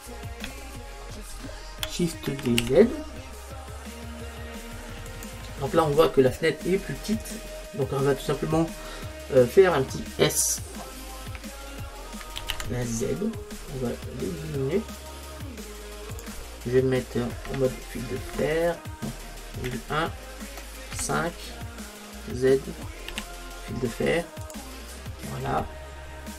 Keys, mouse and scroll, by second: 2.2 middle click, 2.3 shift+d, 5.3 click, 7.2-8.4 middle drag, 12.4 s, 16.3 click, 17.5 KP_7, 19.7 KP_1, 23.1 z, 25.1-26.3 middle drag.